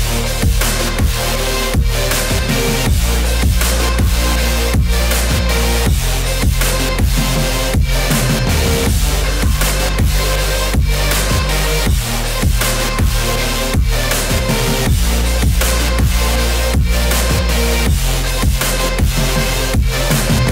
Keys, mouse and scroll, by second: 2.1 ctrl+z, 3.0 space, 3.9 click, 5.3 Right, 6.1 click, 6.8 Right, 7.7 click, 12.8 ctrl+z, 14.6 ctrl+z, 15.3 space, 15.7 click, 19.6 space, 20.1 click.